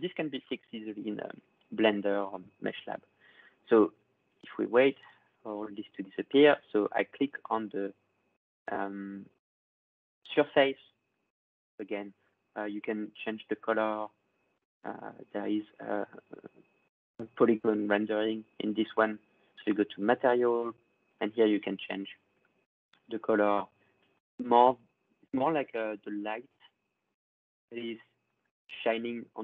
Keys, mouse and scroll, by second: 0.7 click, 1.6-4.5 drag, 6.6 click, 8.0-11.0 drag, 13.0 click, 17.0 click, 19.7 click, 21.0 click, 21.1 click, 22.2 click, 22.8 click, 24.0 click, 25.2 click, 27.8 click, 28.2 click, 28.5 click.